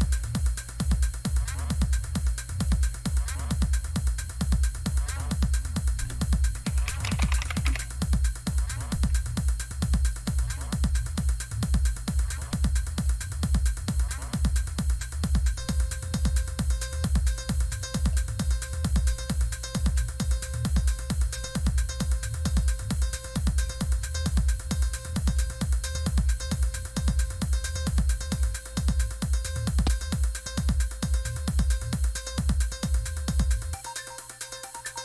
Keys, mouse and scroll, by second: 0.0 click, 2.7 click, 5.6 click, 6.6-8.1 typing, 10.1 click, 12.9 click, 18.0 click, 19.8 click, 22.4 click, 25.2 click, 27.9 click, 28.3 click, 33.0 click.